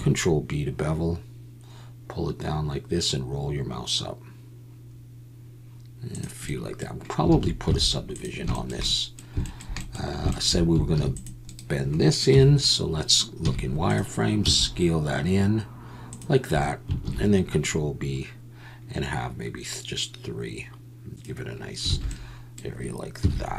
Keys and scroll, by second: 7.3 alt+a, 7.6 z, 10.9 ctrl+r, 12.3 KP_1, 13.4 z, 14.4 s, 17.0 ctrl+b, 21.9 alt+a, 23.2 z.